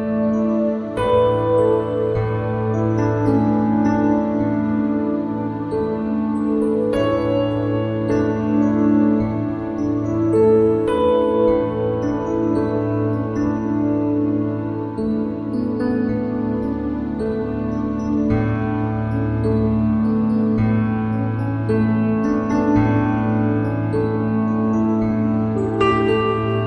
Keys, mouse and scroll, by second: 2.2-7.4 drag, 7.4 s, 13.5 e, 19.1 Tab, 20.1 Tab, 22.0 ctrl+r, 24.1 ctrl+r.